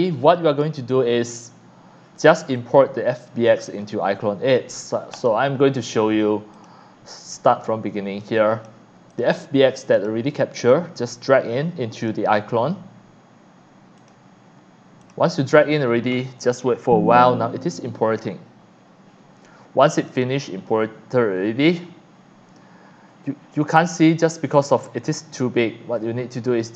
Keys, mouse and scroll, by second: 0.2 click, 2.6-3.2 drag, 5.1 click, 6.5 click, 8.6 click, 9.1 click, 9.9 click, 10.7-12.1 drag, 14.0 click, 15.0 click, 19.8 click, 26.0-26.7 drag.